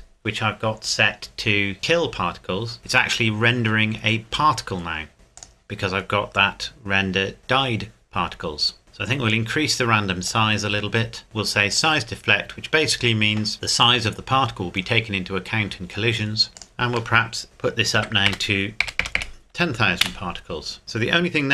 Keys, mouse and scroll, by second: 5.4 click, 5.9-6.6 scroll down 1, 9.3 click, 11.7 click, 16.5 scroll up 1, 16.6 click, 18.0 KP_1, 18.3 KP_0, 20.0 KP_Enter, 20.8 middle click.